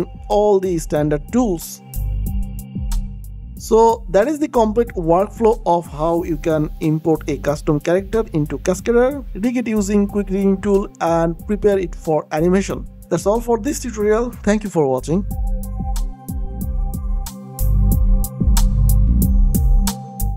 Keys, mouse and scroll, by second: 0.0 alt+click, 0.4 ctrl+click, 2.1 ctrl+click, 2.6 alt+click, 3.8 click, 4.8 ctrl+click, 6.5 click, 7.3 alt+click, 8.2 click, 8.4 alt+click, 9.0 ctrl+click, 10.0 alt+click, 10.8 click, 11.6 ctrl+click, 12.6 alt+click, 13.9 ctrl+click, 15.2 alt+click, 16.0 s, 16.6 alt+click.